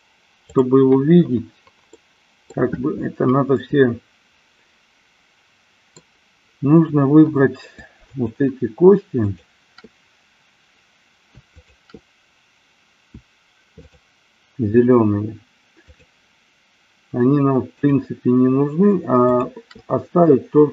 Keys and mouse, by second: 0.5 click, 2.0-2.6 middle drag, 3.5-6.0 middle drag, 8.1-9.4 shift+drag, 11.6-12.9 shift+drag, 13.8-15.1 shift+drag, 15.9-17.3 shift+drag, 17.9-19.3 shift+drag.